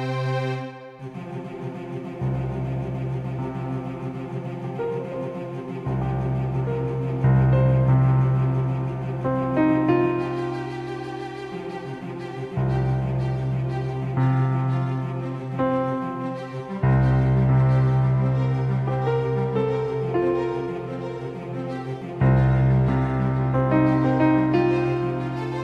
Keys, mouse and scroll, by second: 15.4 c, 18.6 s.